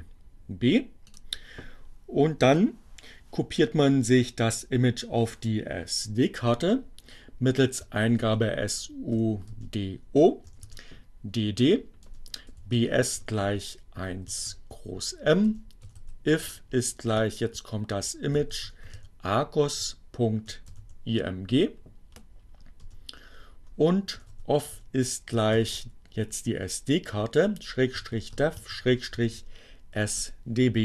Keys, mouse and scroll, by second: 0.2 click, 6.5-7.6 typing, 9.2 o, 9.6 space, 11.9-20.9 typing, 22.2 space, 22.6 o, 24.4 f, 24.7 shift+0, 25.6 shift+7, 27.0-30.0 typing, 30.2 Return.